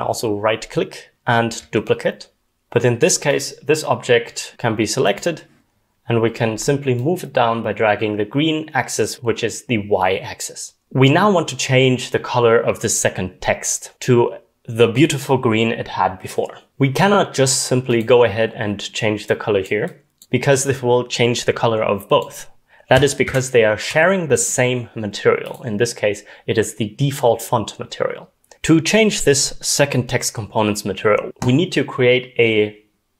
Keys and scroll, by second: 10.8 ctrl+z, 23.3 ctrl+z.